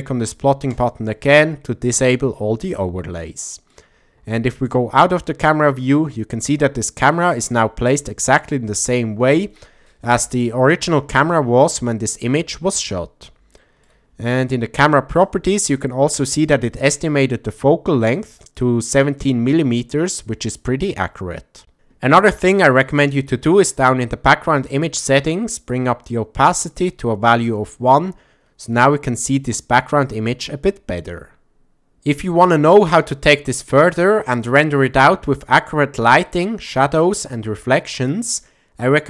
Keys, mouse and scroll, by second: 0.7 click, 3.3-3.7 middle drag, 4.3 shift+middle drag, 4.7-6.5 middle drag, 7.0 click, 8.1-8.4 shift+middle drag, 10.1 KP_0, 13.6 shift+middle click, 15.1 click, 25.8 click, 27.9-28.8 ctrl+middle drag.